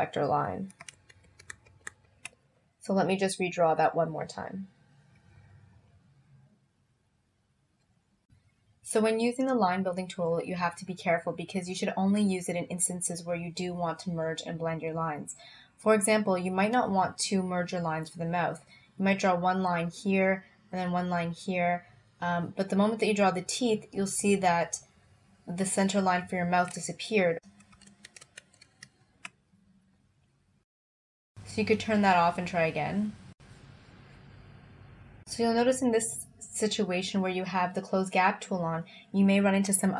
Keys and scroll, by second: 0.9 super+z, 27.8 super+z.